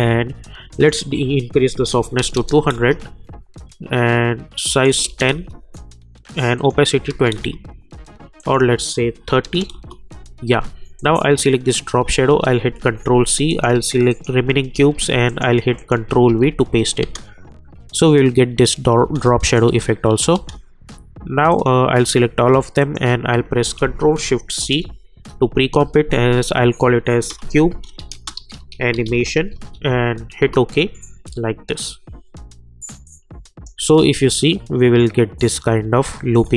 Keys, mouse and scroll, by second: 0.4 click, 2.7 Return, 4.7 click, 5.0 click, 5.3 Return, 6.5 click, 7.3 Return, 8.4 click, 9.7 Return, 11.0 click, 12.6 ctrl+c, 13.5 click, 14.1 shift+click, 14.7 ctrl+v, 15.2 click, 15.7 shift+click, 16.2 ctrl+v, 17.0 space, 19.0 space, 19.4 click, 19.6 space, 21.5 click, 22.8 shift+click, 24.5 ctrl+shift+c, 26.9-30.5 typing, 33.0 click, 33.7 space, 36.2 space.